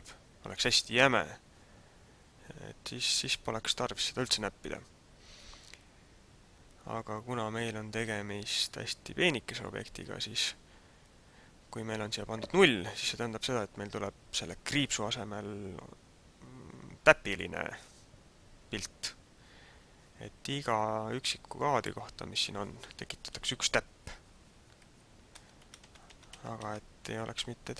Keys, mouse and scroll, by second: 20.6 click, 23.1 Left, 23.4 Left, 23.8 Left, 24.1 Left, 24.4 Left, 24.8 Left, 25.3 Right, 25.7 Right, 26.1 Right, 26.3 Right, 26.7 Right, 27.1 Left, 27.4 Right.